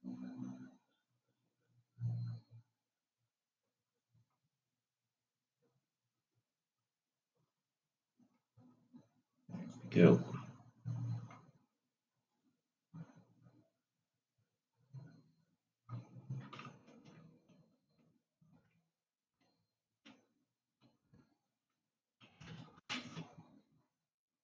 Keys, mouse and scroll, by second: 4.3-7.5 drag, 7.7-10.2 drag, 12.6 click, 17.1 ctrl+z, 18.0 ctrl+z, 19.5 ctrl+z, 23.0 ctrl+r.